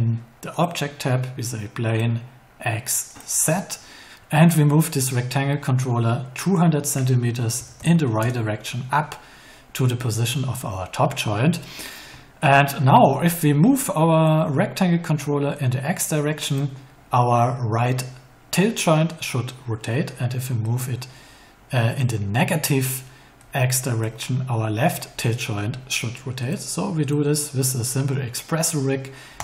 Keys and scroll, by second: 7.5 2, 8.1 Return.